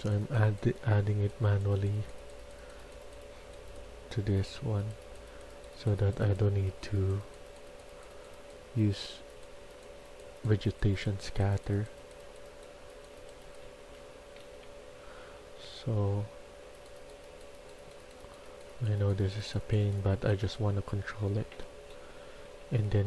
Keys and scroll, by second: 13.6-15.1 typing, 21.1 typing.